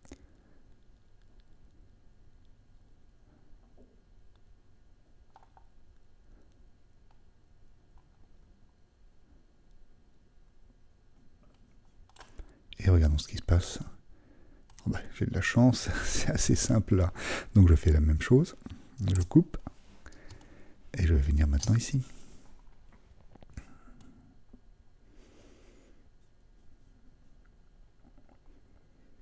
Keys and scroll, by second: 19.1 super+d.